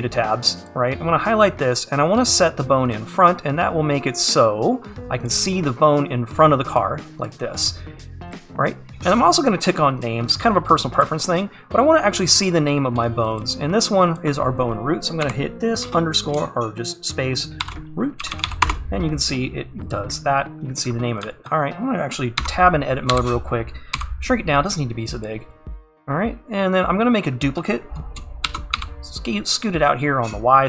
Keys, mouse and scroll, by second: 2.9-11.1 drag, 19.4 o, 20.8-21.3 scroll down 1, 21.3 `, 22.4 Tab, 24.0 s, 25.5-25.9 scroll up 2, 25.9-27.3 scroll down 2, 27.3-28.2 scroll down 1, 28.2-28.5 scroll down 1, 28.5 shift+d.